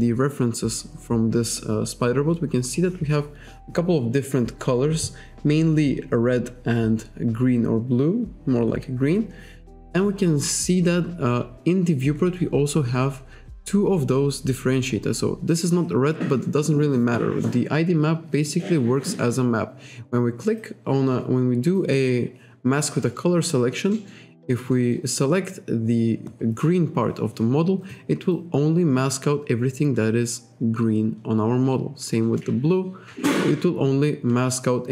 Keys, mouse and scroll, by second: 11.7-12.6 scroll up 2.